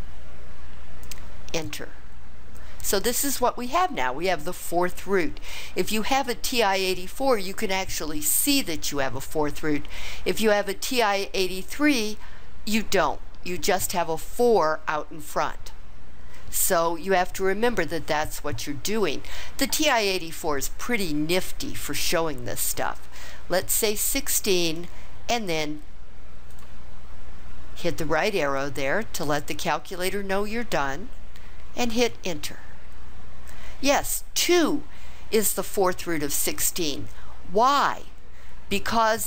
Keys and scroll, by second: 1.5 Return, 23.9 1, 24.6 6, 26.5 ), 31.9 Return.